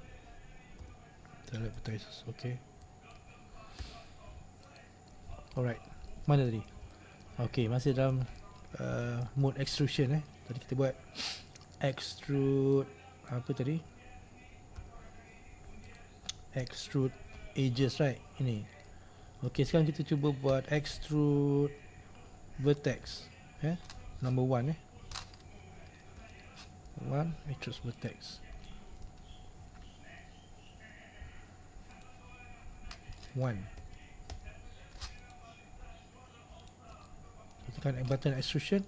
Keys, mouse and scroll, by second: 2.0 x, 3.2 click, 4.9 x, 5.3-5.6 scroll down 2, 5.6 middle click, 5.7-6.2 scroll up 1, 6.2-8.9 middle drag, 8.9-9.5 scroll up 1, 9.5 shift+middle click, 10.0-10.4 scroll down 1, 10.4 middle click, 10.9-11.6 scroll up 2, 11.6-13.4 scroll up 1, 13.4 click, 16.1 x, 19.0-22.8 middle drag, 22.8 right click, 28.1 right click, 28.8-32.0 middle drag, 32.0 right click, 35.3 right click, 36.7 shift+right click, 37.2-38.8 middle drag.